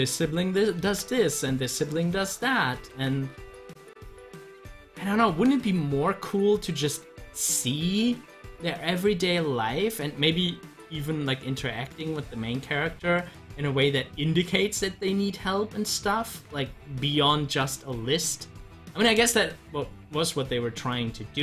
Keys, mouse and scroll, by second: 0.8 ctrl+z, 2.9 z, 3.7-10.4 drag, 15.2 click.